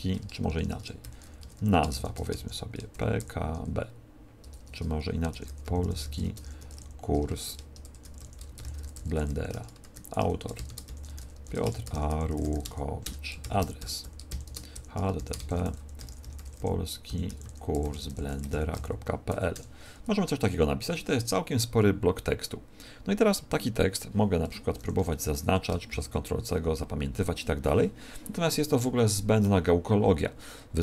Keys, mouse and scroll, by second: 0.0-3.1 typing, 4.3-19.2 typing, 9.4 Return, 12.9 Return, 19.5 Return, 24.7 shift+Up, 24.9 shift+Up, 25.0 shift+Up, 25.8 ctrl+c.